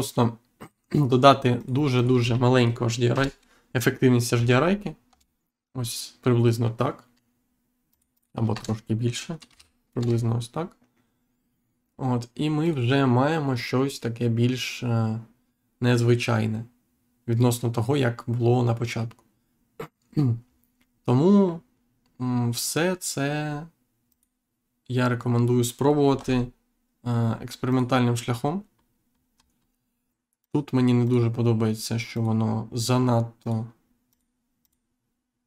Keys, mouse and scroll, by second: 0.5 click, 1.5 click, 3.1 BackSpace, 5.0 Return, 7.8 click, 8.4 BackSpace, 9.9 Return, 12.6 click, 24.0 click, 26.1 Insert, 27.6 click, 28.7 scroll up 1, 29.5 scroll up 1, 30.3 click, 31.0 click, 32.1 click, 33.3 click, 34.0 click.